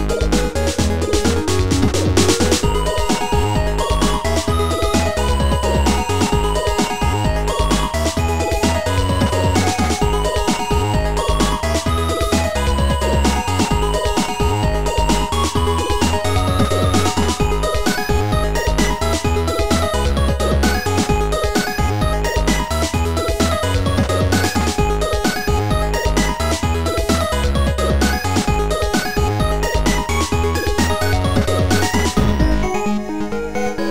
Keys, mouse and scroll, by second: 4.3 click, 5.4 click, 10.1 click, 11.5 click, 13.1 click, 13.9 shift+click, 14.5 shift+click, 16.0 shift+click, 17.4 shift+click, 18.0 shift+click, 18.9 shift+click, 20.0 shift+click, 20.9 click, 21.9 Delete, 23.1 click, 26.4 click, 31.3 click.